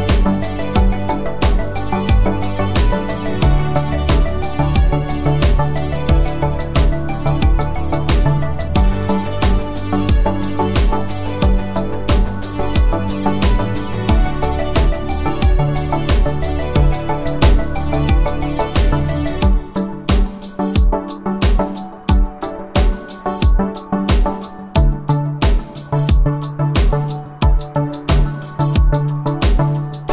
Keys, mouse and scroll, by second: 1.2 shift+click, 3.9 space, 13.1 space, 15.6-17.5 click, 23.7 click, 25.4 shift+click, 29.8 u.